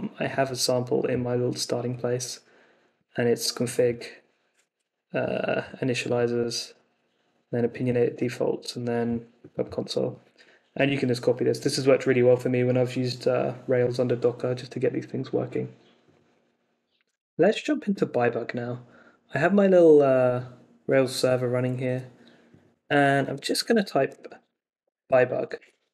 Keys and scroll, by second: 23.2 Escape, 23.7-25.5 typing, 25.5 super+s.